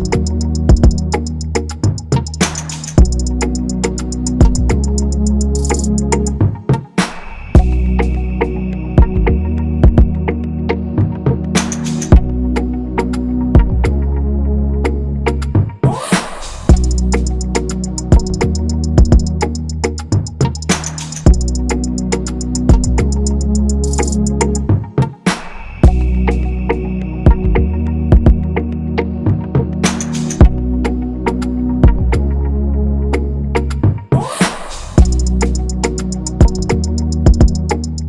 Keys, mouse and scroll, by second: 0.0-1.3 typing, 6.8 shift+click, 9.7-10.0 scroll, 10.0 typing, 13.5 typing, 13.7 ctrl+-, 14.6 ctrl+=, 14.8 ctrl+=, 16.6 ctrl+z, 17.2 alt+click, 17.8 double click, 18.0 ctrl+a, 18.3 alt+Tab, 20.6-21.5 typing, 20.9 alt+Tab, 28.0 typing.